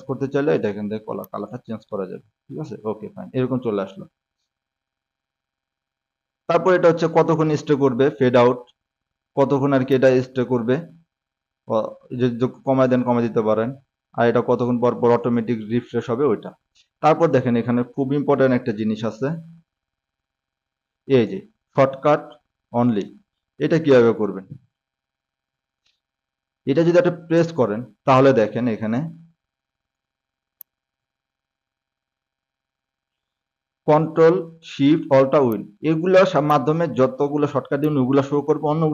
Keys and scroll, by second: 2.8-3.9 typing, 19.6 ctrl+shift+d, 20.6 r, 25.8 Escape, 26.4 ctrl+shift+s.